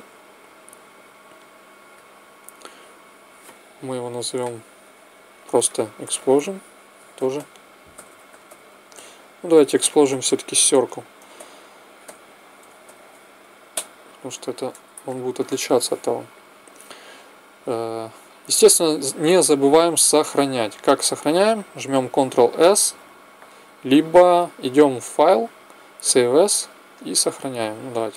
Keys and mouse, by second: 1.5-3.3 drag, 7.9 s, 23.9 ctrl+s, 24.0-26.8 drag, 27.3 click.